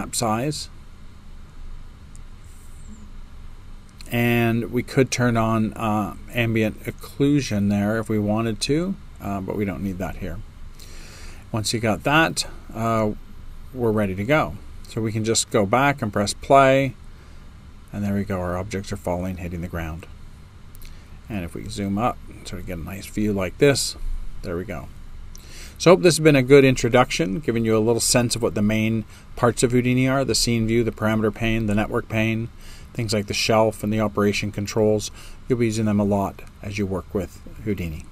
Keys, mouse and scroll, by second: 20.3 right click, 20.3 space, 21.1-22.4 middle drag, 22.4 click.